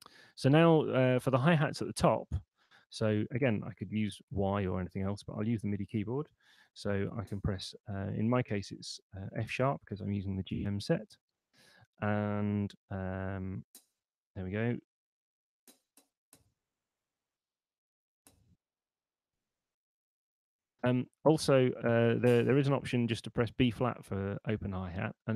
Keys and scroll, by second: 2.6 Up, 4.5 Down, 6.8 6, 13.6 5, 18.0 6, 18.7 5.